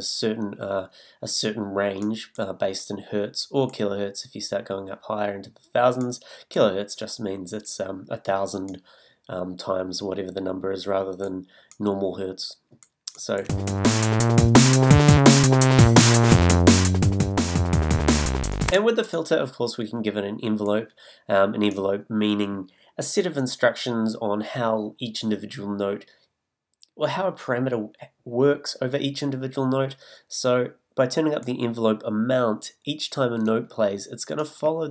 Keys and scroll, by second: 13.4 space, 18.7 space.